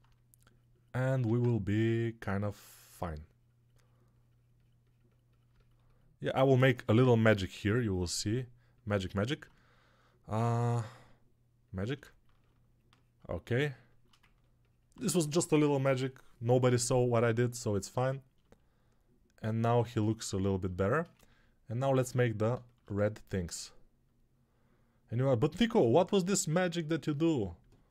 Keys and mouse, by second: 1.2 alt+q, 22.2 alt+q, 25.0-27.9 drag.